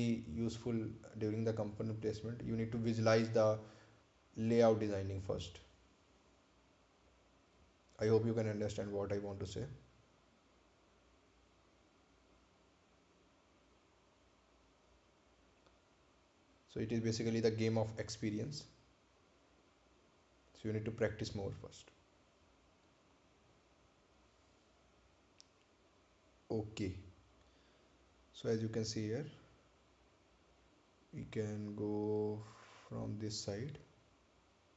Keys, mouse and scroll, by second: 3.7-6.0 scroll up 1, 8.8 click, 16.8-17.2 scroll down 1, 19.4 scroll down 1, 19.5 ctrl+click, 22.2 ctrl+click, 22.3 scroll up 1, 29.8 click, 34.6 click.